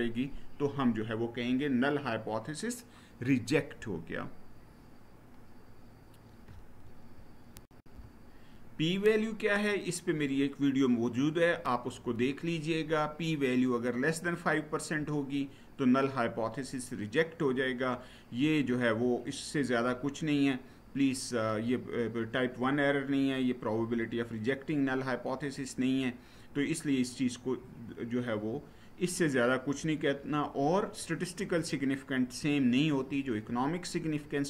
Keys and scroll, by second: 7.4 shift+F9.